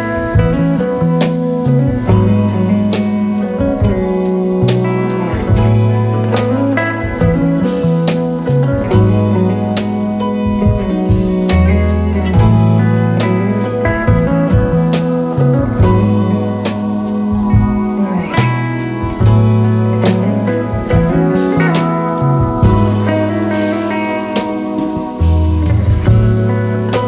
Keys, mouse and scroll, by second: 8.4 scroll down 5, 11.5 KP_0, 12.3 click, 14.1 click, 22.5-27.0 drag.